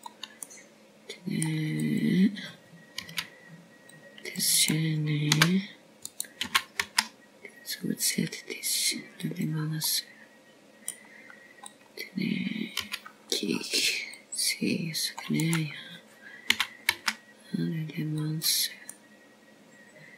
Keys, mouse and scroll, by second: 2.0 g, 3.3 middle click, 4.6 click, 5.9 c, 8.2 g, 9.3 s, 12.7 middle click, 14.6 click, 15.7 c, 18.3 right click, 19.4 s.